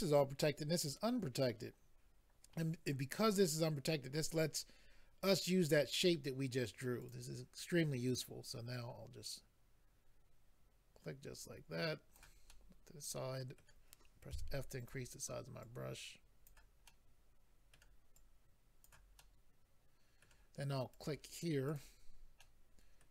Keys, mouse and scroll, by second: 7.0 click, 7.1 click, 8.0 click, 8.2 click, 8.7 click, 12.5 middle click, 14.3 f, 14.8 click, 14.9 click, 15.6 click, 16.8 middle click, 18.1 click, 19.2 middle click, 20.9 click, 21.6 click, 22.3 middle click.